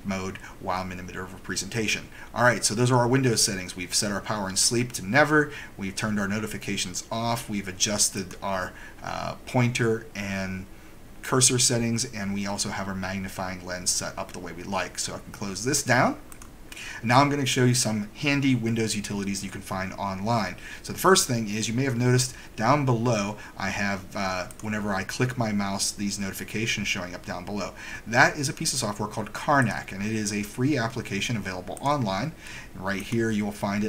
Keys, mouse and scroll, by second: 8.3 right click, 16.5 click, 24.6 click, 32.0 click, 33.1 click.